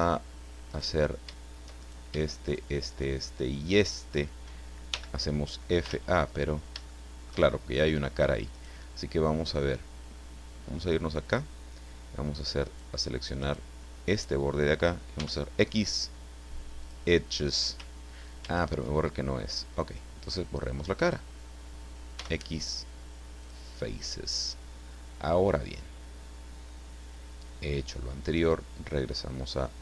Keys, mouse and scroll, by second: 0.7 right click, 1.8 shift+right click, 2.4 shift+right click, 2.9 shift+right click, 3.6 shift+right click, 4.9 f, 5.8 ctrl+z, 6.4-6.8 ctrl+scroll up 3, 6.8 shift+middle click, 8.5 right click, 11.2 click, 12.6 right click, 13.4 right click, 15.1 x, 16.8 click, 18.4 ctrl+z, 20.3 click, 20.9 right click, 22.2 x, 23.4 click, 29.4 click.